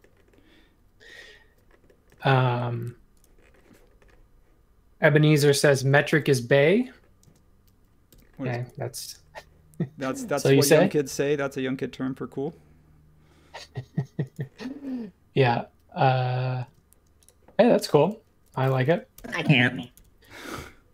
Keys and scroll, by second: 2.1 m, 6.1 super+1, 7.2 space, 8.1 m, 16.6 space, 19.1 BackSpace, 19.9 BackSpace.